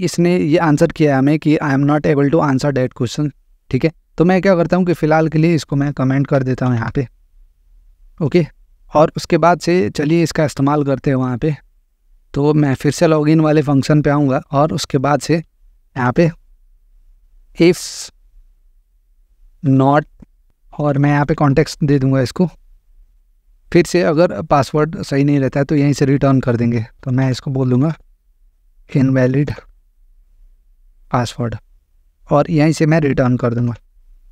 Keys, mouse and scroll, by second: 4.6-5.6 drag, 6.6 ctrl+/, 9.8-10.8 drag, 11.2-12.2 drag, 12.6-13.7 drag, 15.0 click, 15.9 Return, 16.0 Return, 16.3-17.0 typing, 17.4 Return, 18.5 Return, 18.5 typing, 28.3-31.5 typing, 32.8 click, 33.4-34.3 typing.